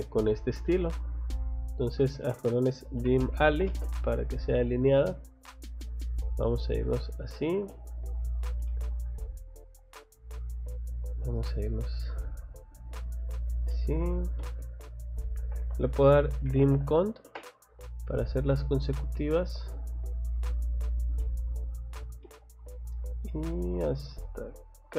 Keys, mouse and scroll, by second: 0.9 click, 1.8 Escape, 2.5-4.0 typing, 5.2 click, 6.1 click, 7.2 click, 8.1 click, 8.3 scroll down 1, 8.7 middle click, 9.9 click, 10.9-11.9 scroll down 1, 12.1 scroll up 1, 13.4 scroll down 1, 13.7 middle click, 15.4 Escape, 15.9-17.5 typing, 18.6 click, 18.9 middle click, 20.1 click, 20.9 click, 21.2 middle click, 22.2 middle click, 23.5 middle click, 24.8 click.